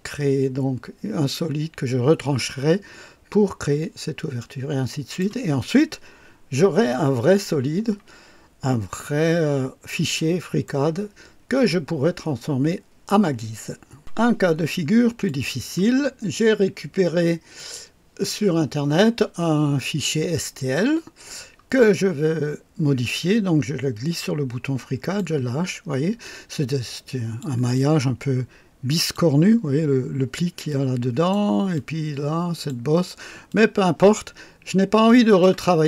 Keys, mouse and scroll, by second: 4.4-5.4 drag, 9.4-9.9 scroll down 3, 10.1-10.8 right drag, 14.0 click, 15.2 click, 17.5 click, 20.7-24.8 drag, 24.9 click, 26.2-27.6 drag, 27.7-29.3 drag, 30.6 click, 31.7 click, 33.5-35.6 drag.